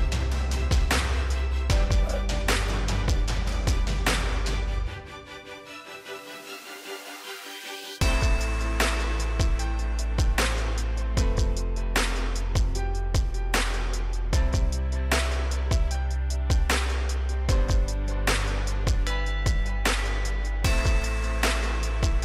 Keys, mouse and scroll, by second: 3.1-3.9 scroll up 1, 3.9-6.1 scroll down 1, 14.2 click.